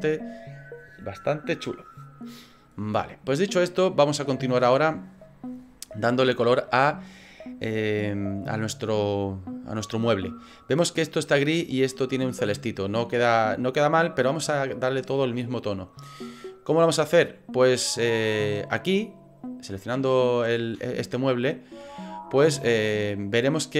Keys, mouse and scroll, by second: 17.7 click.